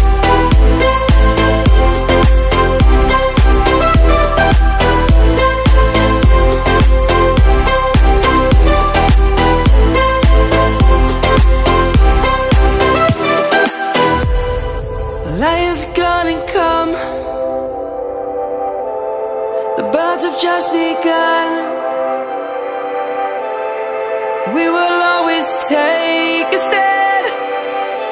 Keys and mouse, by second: 0.7 click, 1.0 Tab, 1.8 click, 9.6 ctrl+z, 11.2 click, 15.7 click, 16.3 Tab, 16.7 click, 17.1 Tab, 18.1 click, 20.1 shift+click, 20.3 shift+click, 20.8 shift+click, 20.9 shift+click, 21.2 shift+click, 21.5 shift+click, 21.7 shift+click, 22.0 shift+click, 22.1 shift+click, 22.4 shift+click, 22.6 shift+click, 22.8 shift+click, 23.2 shift+click, 23.4 shift+click, 23.6 shift+click, 23.8 shift+click, 23.9 shift+click, 24.3 shift+click, 24.5 shift+click, 24.8 shift+click, 25.7 shift+click, 26.3 shift+click, 26.4 shift+click, 27.2 shift+click, 27.4 shift+click.